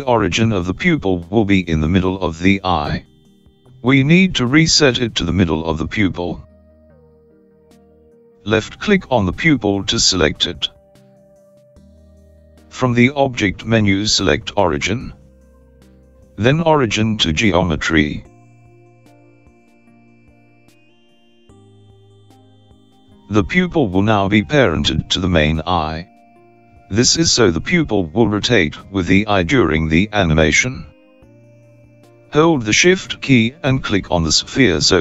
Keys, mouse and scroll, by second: 0.4 middle click, 2.7 click, 8.1 click, 13.8 click.